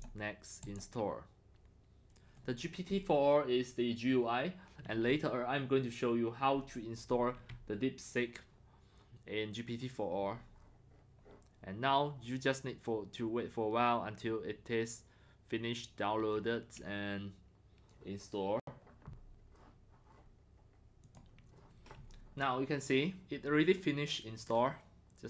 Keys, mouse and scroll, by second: 0.6 click, 11.4 drag, 21.0 click, 21.2 click.